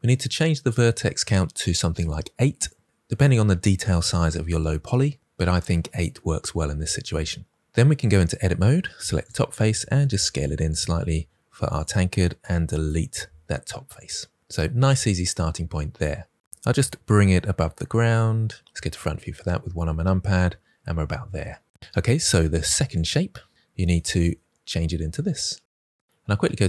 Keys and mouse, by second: 7.9 Tab, 9.0 3, 9.2 click, 9.9 s, 12.7 Delete, 16.5 Tab, 16.5 g, 16.7 z, 18.6 KP_1, 22.3-22.8 drag.